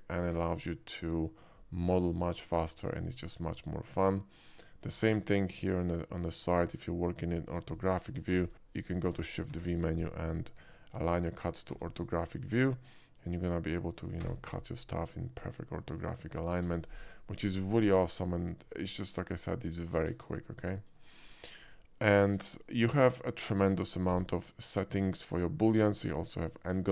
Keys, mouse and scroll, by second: 1.4-2.7 middle drag, 3.2 alt+middle click, 3.6 alt+middle click, 5.0 KP_5, 5.6 shift+KP_5, 5.7 middle click, 8.3 shift+v, 11.0 click, 11.0 shift+v, 11.8 d, 12.4 click, 13.4-14.0 drag, 14.3 space, 14.5-16.3 middle drag, 16.6 KP_5, 17.2-18.6 middle drag, 19.0 alt+middle drag, 19.7 alt+middle click, 20.1 KP_5, 20.7 shift+KP_5, 20.8 middle click, 21.7-22.1 middle drag, 22.4 KP_5, 24.2 d, 26.3 click.